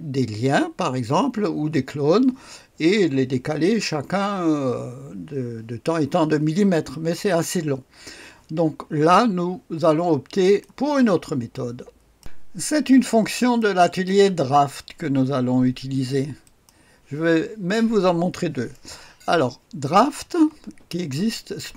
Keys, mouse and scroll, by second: 10.4 click, 11.1 click, 12.0-12.7 typing, 12.2 click, 12.7-13.6 scroll up 1, 13.6 click, 14.1 right click, 14.4-14.8 scroll down 1, 16.4 click, 19.8 click, 20.7-21.7 scroll down 1.